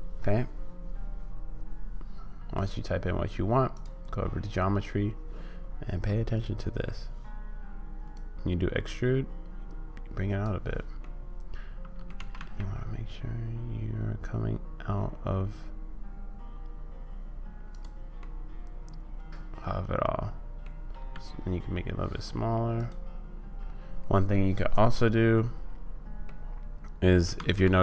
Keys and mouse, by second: 2.5 click, 3.8 click, 6.1 middle click, 8.3-10.5 drag, 11.1-12.1 middle drag, 12.1 g, 18.1-20.6 middle drag, 21.1 s, 24.5 middle click, 26.2 middle click, 27.3 ctrl+z.